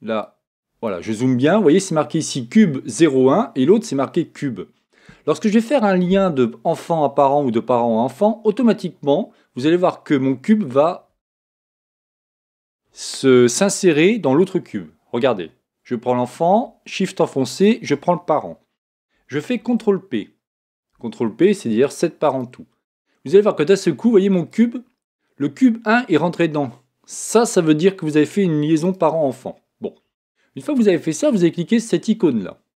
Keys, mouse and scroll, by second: 0.2 click, 17.5-19.4 right drag, 19.6 ctrl+p, 24.5 click, 30.4 click.